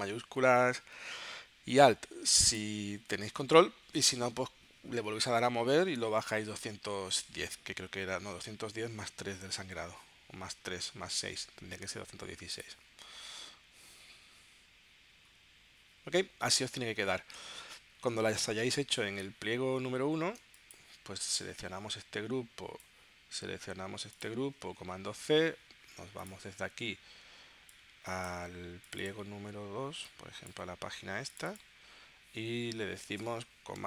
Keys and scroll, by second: 20.4 space, 25.1 super+c.